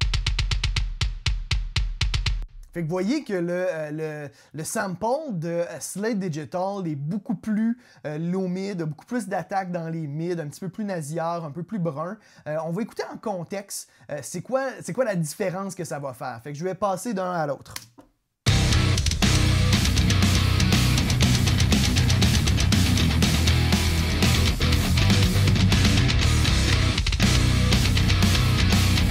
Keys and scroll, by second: 2.2 space, 18.3 space.